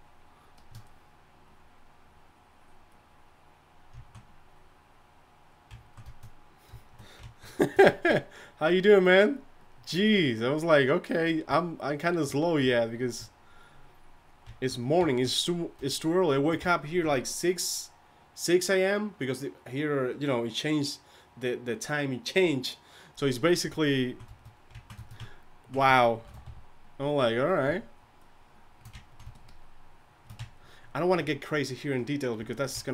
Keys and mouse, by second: 8.4-24.0 drag, 26.2 shift+c, 26.4 f, 27.1-32.9 drag.